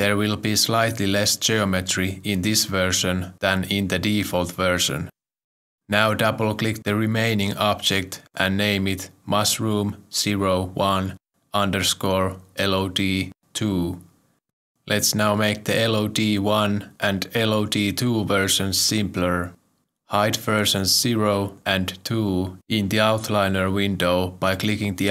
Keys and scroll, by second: 4.8 Return, 8.9 Return, 9.0 ctrl+Right, 9.4 BackSpace, 11.5-13.5 typing.